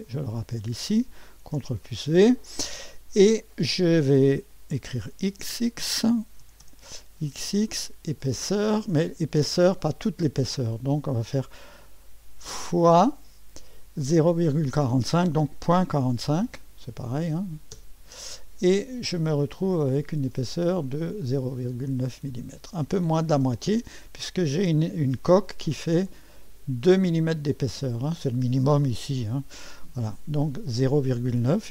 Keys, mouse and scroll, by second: 0.0 click, 0.2 ctrl+v, 1.5 ctrl+v, 6.4 typing, 8.2 click, 12.8 typing, 15.7 KP_Decimal, 16.1 KP_4, 16.4 KP_5, 17.7 Return, 19.8 click, 21.2-22.1 drag, 22.4-23.1 scroll up 1, 23.6-26.0 right drag, 26.0 click, 28.6 click, 29.0 click.